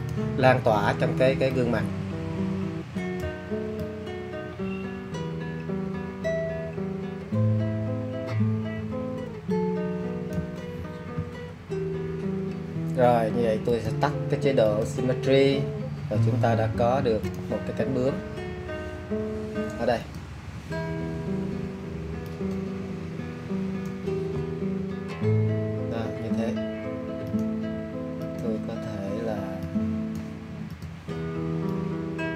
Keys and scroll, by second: 29.7 shift+super+e.